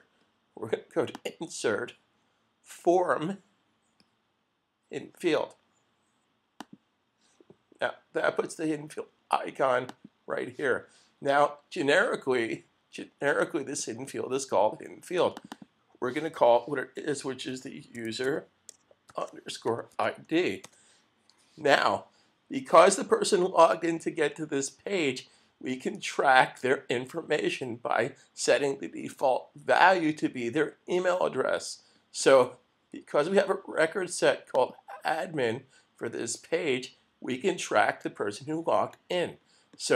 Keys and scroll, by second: 17.2-21.1 typing.